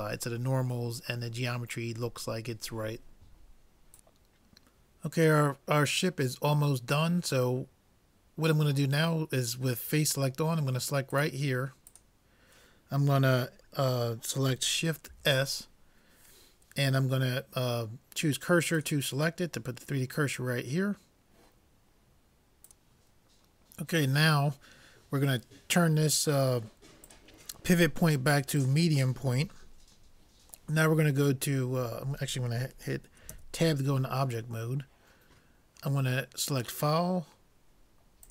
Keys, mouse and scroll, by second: 11.2-13.7 drag, 15.2 shift+s, 27.0-28.8 drag, 33.4 Tab, 36.6-38.3 drag.